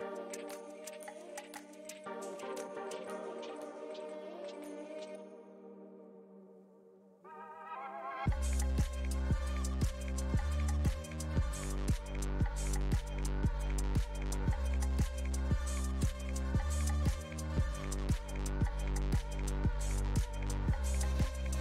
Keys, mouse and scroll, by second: 2.1 shift+middle click, 2.6-3.7 ctrl+drag, 3.7 middle click, 4.7 space, 5.2-6.6 ctrl+drag, 6.6 f, 7.2-8.3 drag, 8.3 f, 9.1-15.9 drag, 15.9 f, 16.6 click, 17.6 middle click, 18.1 ctrl+click, 18.6 middle click, 19.0 ctrl+click, 19.6 middle click, 20.0-21.6 drag.